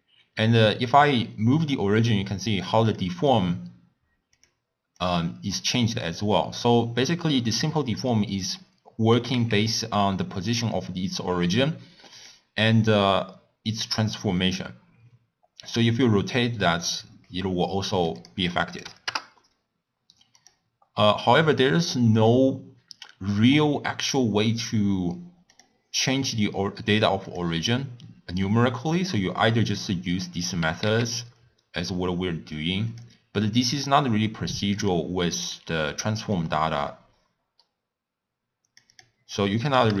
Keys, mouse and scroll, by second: 9.2 g, 16.1-30.7 drag, 30.7 g, 34.7-40.0 drag.